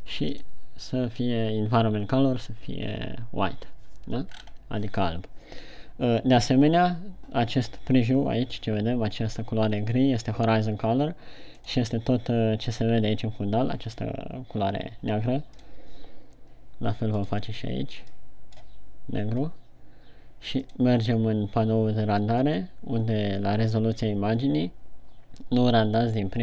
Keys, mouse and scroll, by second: 0.6 click, 4.7-6.5 scroll up 3, 17.5 click, 21.1 click.